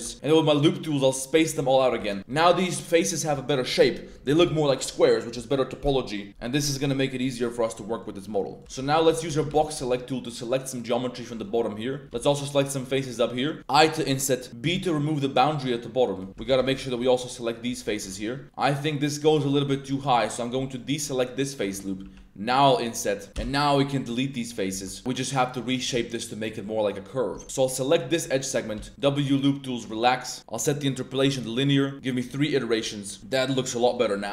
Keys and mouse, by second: 0.1 w, 1.5 Tab, 1.7 drag, 2.5 right click, 3.1 right click, 7.3-8.0 middle drag, 8.2-8.6 middle drag, 8.6-9.7 typing, 10.7 middle click, 11.4 middle click, 12.1 b, 12.9 middle click, 14.6 b, 16.1 click, 16.3 ctrl+z, 16.7 b, 17.7 z, 17.8 middle click, 18.3 i, 19.3 middle click, 19.7 ctrl+z, 20.7 alt+shift+click, 21.2 click, 21.6 click, 22.0 i, 23.2 click, 24.1 x, 24.7 Tab, 24.8 click, 25.0 Tab, 25.9 Tab, 27.3 Tab, 27.4 ctrl+2, 28.7 w, 30.5-31.3 drag, 31.9 click, 32.8 middle click, 33.2 Tab, 33.3-33.9 middle drag, 34.0 click.